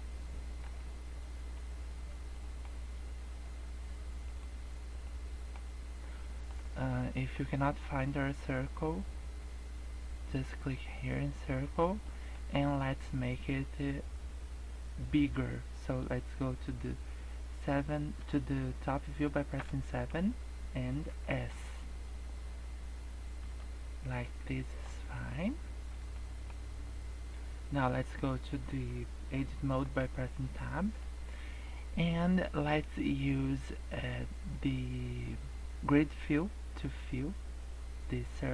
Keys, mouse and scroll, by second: 0.7-1.2 scroll down 10, 1.4-2.3 scroll up 16, 2.3 middle click, 2.6 scroll up 2, 4.3 click, 5.0 middle click, 5.5 scroll up 2, 6.0-6.4 scroll down 3, 6.2 middle click, 6.5 scroll up 2, 7.0 middle click, 7.4 scroll down 3, 7.8 middle click, 12.0 middle click, 12.4 scroll down 2, 12.6 middle click, 19.5 KP_7, 21.0 s, 24.5 shift+middle click, 25.1 middle click, 26.1 middle click, 26.5-27.2 scroll up 2, 27.3 scroll down 2, 30.0 Tab, 30.6 middle click, 37.0 click.